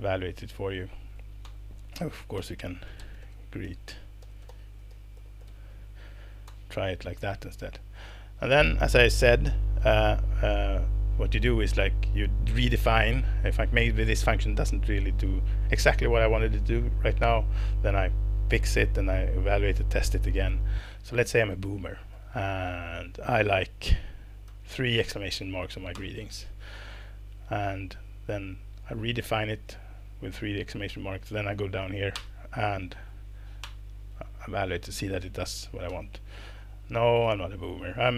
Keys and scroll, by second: 0.5 ctrl+alt+Page_Down, 1.0 ctrl+alt+Page_Down, 1.4 Return, 2.1-6.0 typing, 6.5 alt+Return, 7.4 Escape, 24.5 shift+1, 24.7 shift+1, 25.9 alt+Return, 32.1 alt+Return, 33.0 Down, 33.6 alt+Return, 35.9 Escape.